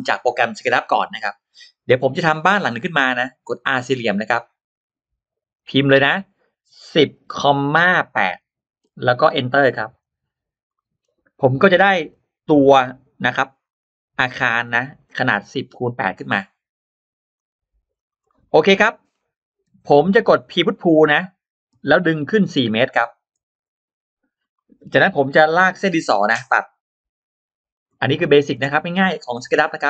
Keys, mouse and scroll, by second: 1.9 click, 2.6 scroll up 1, 5.4 click, 5.4 r, 10.6 middle click, 10.6 scroll up 1, 11.9 click, 12.5 scroll up 1, 13.5 click, 14.3 click, 14.5-14.8 scroll up 2, 14.5 middle click, 14.9-15.2 scroll down 1, 16.0 click, 17.2 click, 17.8 click, 18.1 middle click, 18.6 middle click, 19.6 click, 19.6 e, 20.3 click, 20.8 middle click, 21.9 click, 24.4 Return, 24.4 middle click, 24.4 4, 24.4 p, 24.7-25.0 scroll down 1, 25.0 4, 25.0 p, 26.2 Return, 26.2 click, 26.2 l, 26.2 4, 27.6 click, 28.0 middle click, 28.2-28.5 scroll down 1, 28.5 space, 29.6 m.